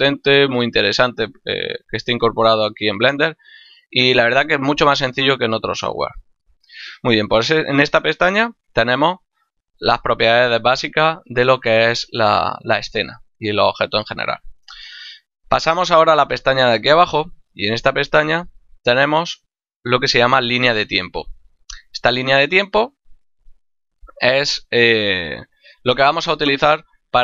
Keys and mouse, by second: 6.6 click, 18.9 click.